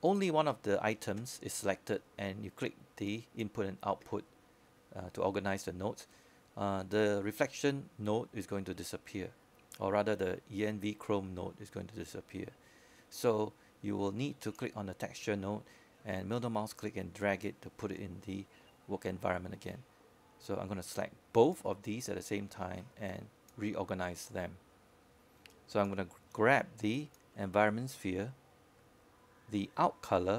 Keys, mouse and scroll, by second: 19.1-20.4 middle drag, 20.4-21.0 scroll up 1, 21.0-21.6 scroll down 1, 21.6-23.3 scroll up 1, 23.3-23.9 scroll down 1, 23.9-27.4 drag.